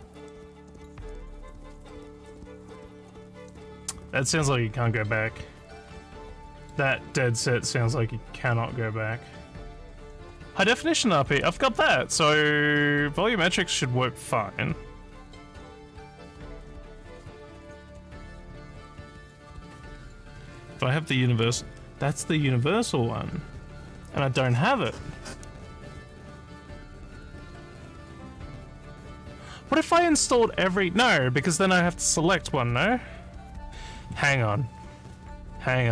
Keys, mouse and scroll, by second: 6.5 middle click, 6.5 scroll down 1, 11.5 click, 18.5 scroll down 2, 20.2 scroll down 2, 21.4 click.